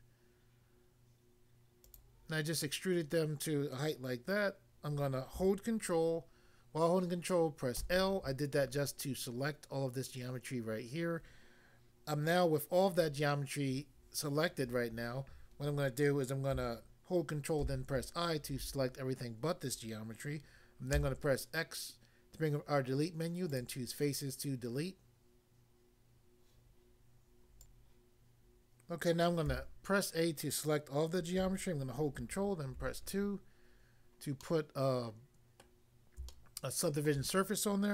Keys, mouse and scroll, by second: 1.9 click, 7.8 ctrl+l, 17.6 ctrl+i, 20.9 x, 23.5 click, 23.6 click, 27.6 click, 29.4 a, 32.8 ctrl+2, 34.4 middle click, 35.6 middle click, 36.4 shift+middle click.